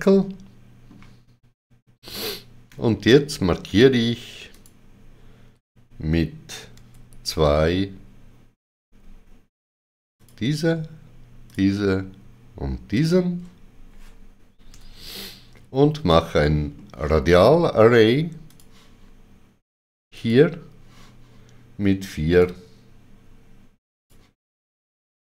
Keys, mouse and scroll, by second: 4.5 alt+click, 6.7 middle click, 6.8 2, 10.2 alt+click, 11.5 shift+click, 12.9 shift+click, 14.7 shift+click, 16.1 shift+middle click, 18.5 click, 20.1 click, 22.4 click.